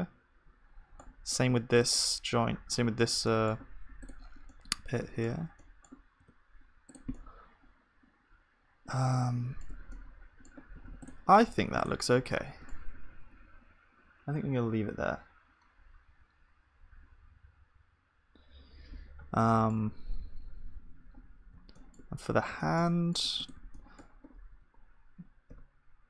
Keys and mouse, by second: 1.8-3.7 drag, 2.2-3.7 right drag, 6.0 middle click, 6.3 g, 9.8 Tab, 9.9-13.8 middle drag, 10.8 ctrl+s, 11.4-13.8 drag, 11.4-13.8 right drag, 11.4 KP_1, 19.4-24.5 middle drag, 24.5 g.